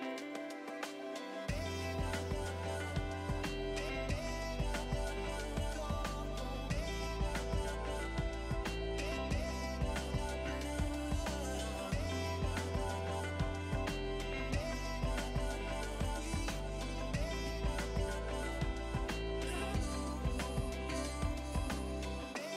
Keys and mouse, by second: 1.4 1, 1.8 Return, 2.3 1, 2.6 1, 2.9 Return, 4.1 click, 5.0 Escape, 5.1 click, 5.8 s, 6.4 click, 9.5 click, 10.5 click, 11.4-12.3 typing, 12.2 click, 17.3 click, 18.3 click, 19.0 click.